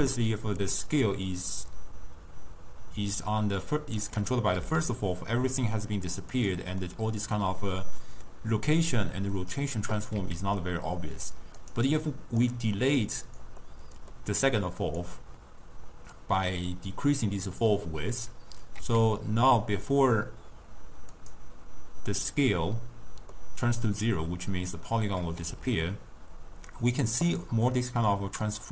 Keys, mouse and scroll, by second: 3.2 click, 4.6 s, 6.9-10.0 middle drag, 10.2 s, 12.5 click, 13.7 middle click, 14.5-17.6 drag, 18.8 s, 23.4-25.5 middle drag, 25.5 s, 27.8-28.7 middle drag.